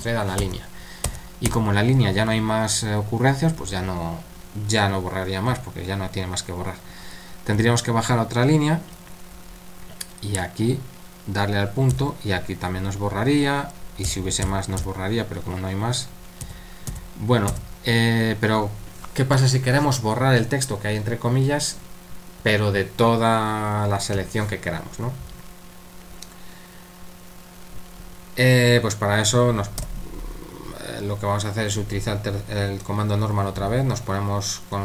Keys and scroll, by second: 0.4-1.0 typing, 7.6 typing, 9.3-9.9 typing, 11.9 typing, 14.1-14.8 typing, 16.4-17.5 typing, 29.8 0.